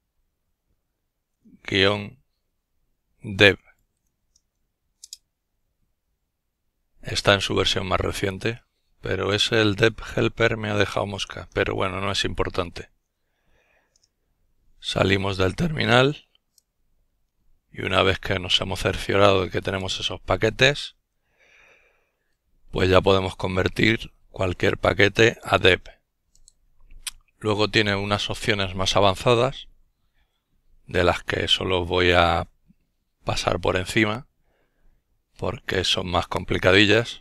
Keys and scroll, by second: 1.7 alt+d, 1.7 alt+e, 2.5 alt+v, 3.4 alt+Return, 10.0 alt+e, 10.7 alt+x, 11.1 alt+i, 11.4 alt+t, 12.3 alt+Return.